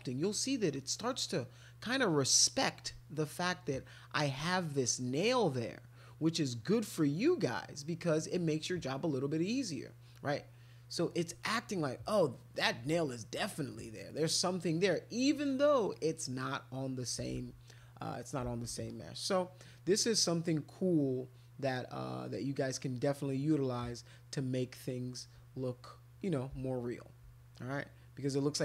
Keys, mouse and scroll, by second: 0.4 click, 0.7 click, 0.9 click, 1.3 click, 2.1 click, 2.5 click, 2.8 click, 3.1 click, 3.6 click, 4.6 click, 4.9 click, 5.5 click, 5.8 click, 6.2 click, 6.5 click, 6.7 click, 7.0 click, 7.4 click, 8.7 click, 8.9 click, 9.2 click, 9.6 click, 9.7 click, 9.9 click, 10.7 click, 11.1-12.6 drag, 13.5 click, 13.8 click, 14.1 click, 14.3 click, 14.6 click, 14.9 click, 15.2 click, 15.5 click, 15.9 click, 17.3 ctrl+z, 18.5 ctrl+z, 18.9-20.5 drag, 21.0 click, 21.3 click, 22.0 click, 23.1 click, 23.7 click, 23.8 click, 24.3 click, 25.0 click, 25.4 ctrl+click, 25.7 click, 25.8 click, 26.0 click, 26.6 shift+click, 26.8 shift+click, 27.0 shift+click, 27.5 click.